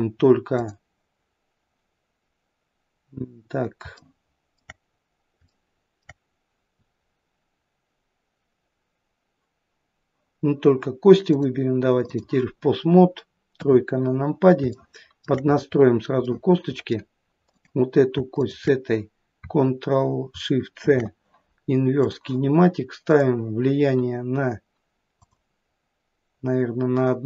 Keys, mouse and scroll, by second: 0.5 click, 4.0 shift+middle click, 6.0 shift+middle click, 11.3 click, 13.6 KP_3, 14.8 shift+middle click, 15.6-16.0 scroll up 3, 16.3 middle click, 17.5 click, 18.4 shift+click, 20.9 ctrl+shift+c, 23.1 click, 25.2 click.